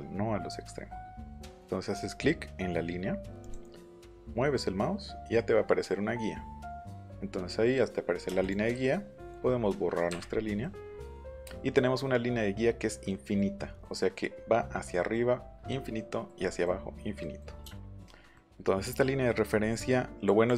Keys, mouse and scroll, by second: 3.4 click, 6.6 click, 8.4 click, 12.7 middle click, 13.6-14.9 middle drag, 16.0 middle click, 18.2 scroll up 1, 19.6 scroll up 1, 20.2 click.